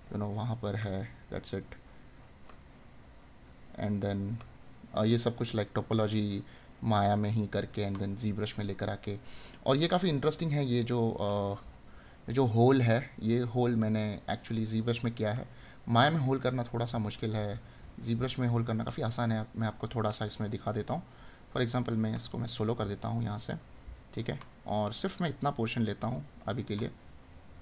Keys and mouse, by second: 10.5 right click, 12.9 right click, 14.7 right click, 17.5 right click, 19.9 right click, 23.4 right click.